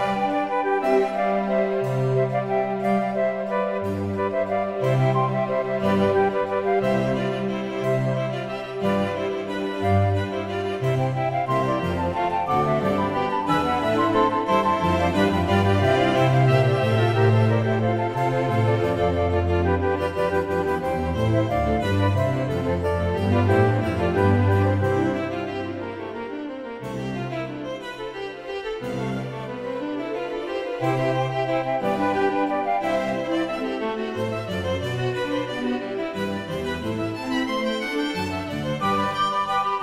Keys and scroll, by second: 4.1 Tab, 28.3 Delete.